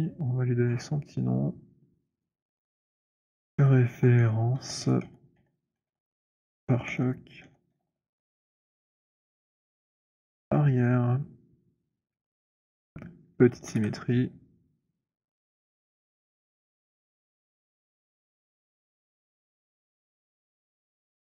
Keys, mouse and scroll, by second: 0.4 scroll, 2.2 click, 3.3-10.7 typing, 4.3 middle click, 12.0 F7, 12.6 click, 13.7 ctrl+shift+d, 15.3 click, 16.4 ctrl+shift+d, 20.6 alt+click.